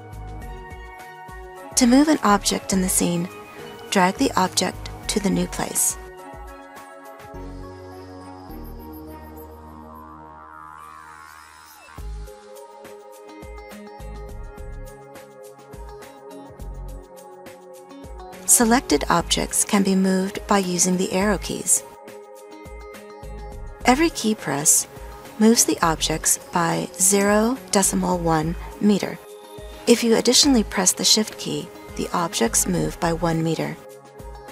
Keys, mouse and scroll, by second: 20.6 Right.